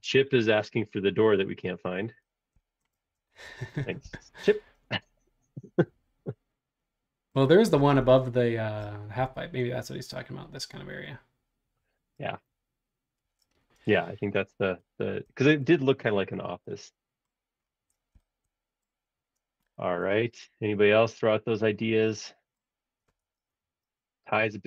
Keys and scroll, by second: 3.0-3.4 typing, 8.0 super+Tab, 13.2 super+Tab, 23.2 super+Tab.